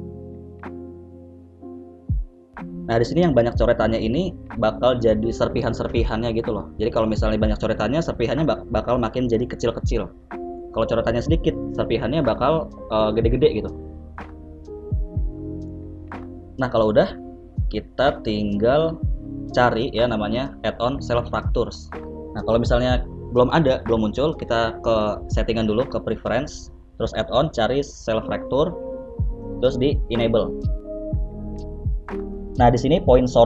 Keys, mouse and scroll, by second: 0.1 click, 0.6 click, 0.9 click, 1.4 click, 1.7 click, 2.4 click, 2.8 click, 3.6 click, 4.0 click, 4.6 click, 5.7 click, 11.2 middle click, 12.8 t, 13.6 click, 13.7 t, 15.7 F3, 16.7 l, 21.4 click, 29.8 F3, 30.4 l.